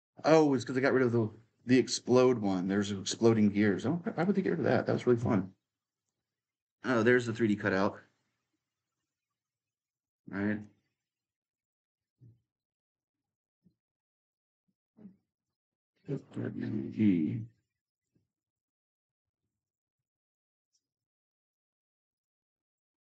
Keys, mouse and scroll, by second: 1.3 q, 2.5 w, 3.1 q, 3.4 a, 4.0 s, 5.7-12.4 drag, 14.1 click, 16.0 w, 16.6 e, 17.8-21.3 right drag, 18.6 q, 19.1 q, 21.3-23.0 drag.